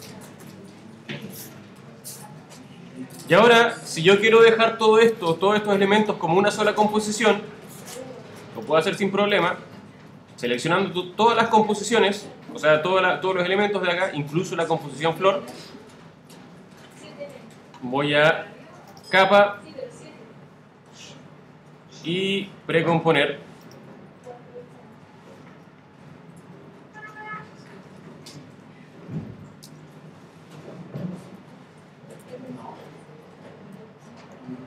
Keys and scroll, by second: 27.9 shift+g, 28.2 shift+i, 30.3 shift+space, 31.3 shift+p.